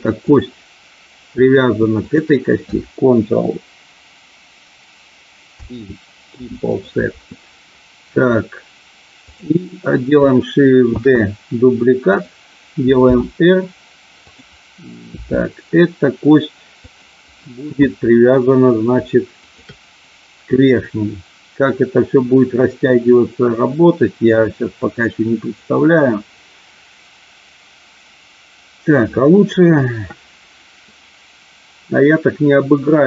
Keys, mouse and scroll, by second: 0.2 click, 2.0 shift+click, 5.5 ctrl+p, 9.1 click, 10.9 shift+d, 12.1 click, 13.0 r, 14.3 click, 15.1 g, 16.8 click, 19.3 shift+click.